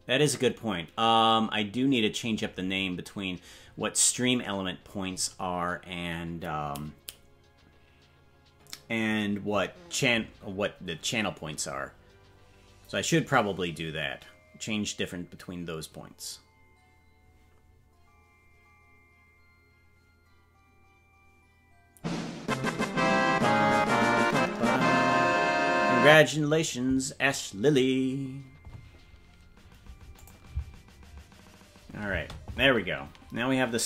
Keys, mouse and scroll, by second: 30.2 click, 30.5 space, 32.5 space.